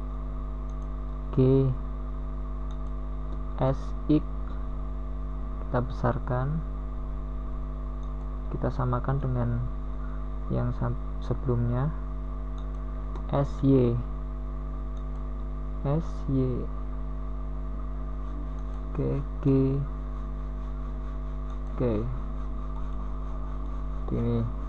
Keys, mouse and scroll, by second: 2.2 KP_1, 2.7 Tab, 5.7 a, 8.3 b, 8.3 g, 9.7 r, 12.5 r, 17.1 s, 18.2 g, 21.2 s.